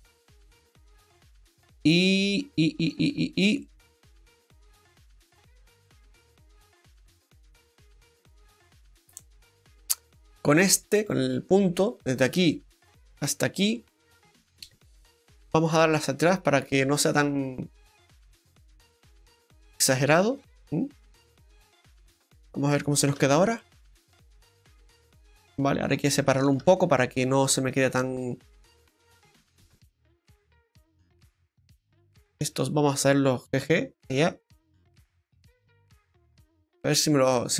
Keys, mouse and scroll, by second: 3.1 scroll down 1, 3.6 middle click, 3.6-4.4 scroll down 3, 5.4 click, 8.6 click, 8.6-9.5 scroll up 2, 8.8 middle click, 11.0 click, 11.9 click, 11.9 right click, 12.2 middle click, 13.7 shift+right click, 14.0 middle click, 15.7 click, 19.5 scroll down 2, 19.7 middle click, 21.7 click, 22.1 middle click, 22.5 right click, 23.2 Tab, 25.8-26.6 scroll up 4, 26.1 shift+middle click, 26.6 Tab, 30.2 click, 30.9 middle click, 31.7 right click, 32.3 shift+right click, 33.5 g, 35.8-36.5 scroll down 2, 36.1 middle click, 37.2 click.